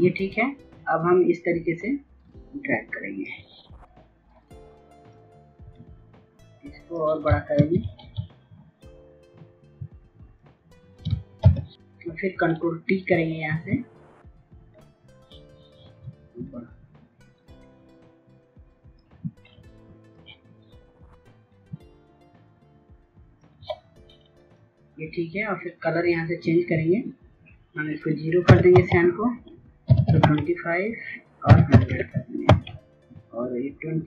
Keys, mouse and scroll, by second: 7.3 ctrl+t, 8.5 shift+click, 11.1 Return, 11.3 click, 14.2 click, 15.7-19.6 shift+drag, 20.8 shift+click, 27.9 KP_0, 28.1 Tab, 29.3 KP_2, 29.5 KP_5, 29.6 Tab, 30.9 KP_1, 31.1 KP_0, 31.9 Tab, 33.5 click.